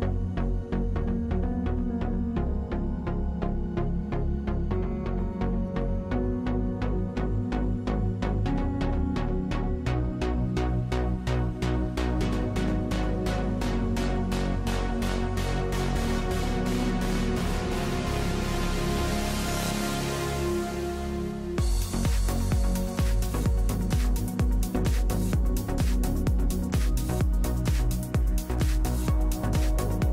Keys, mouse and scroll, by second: 1.6 KP_Divide, 7.1-8.9 drag, 8.9 ctrl+4, 11.9 middle click, 11.9 KP_7, 14.3 KP_7, 14.3 4, 15.6 f, 18.5 ctrl+z, 22.1 click, 24.3 middle click, 25.1 ctrl+z, 25.5 shift+s, 29.5-30.1 drag.